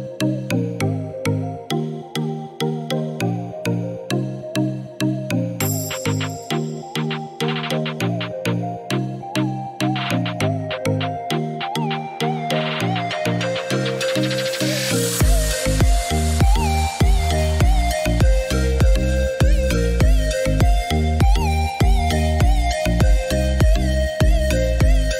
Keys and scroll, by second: 12.5 Delete, 20.5 Escape, 23.5 Escape.